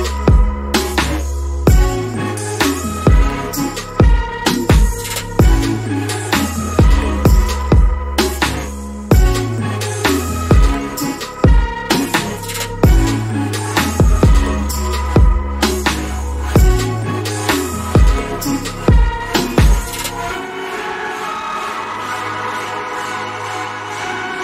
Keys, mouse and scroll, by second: 0.4-1.1 scroll down 1, 1.1 alt+middle click, 2.0-3.2 alt+scroll up 2, 4.3 alt+click, 8.0-8.4 scroll down 1, 8.4 middle click, 9.2 alt+click, 14.3 BackSpace, 15.1 alt+click, 19.9 double click, 20.8 click, 24.2 scroll up 1.